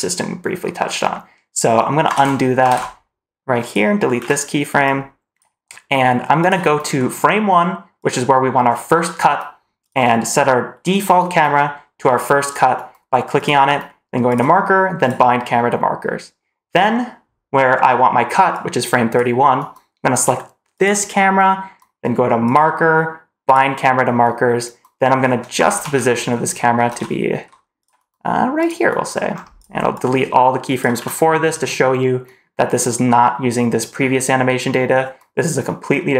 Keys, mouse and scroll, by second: 2.0 ctrl+z, 2.5 ctrl+z, 3.5 click, 4.1 Delete, 4.7 click, 6.3 click, 7.8 click, 9.7 click, 10.8 click, 13.2 click, 14.1-15.0 drag, 18.4 click, 20.6 click, 22.3-23.4 drag, 25.4 shift+`, 28.4 click, 29.2 scroll down 1, 29.4 drag, 29.8-30.8 drag, 30.8 Delete.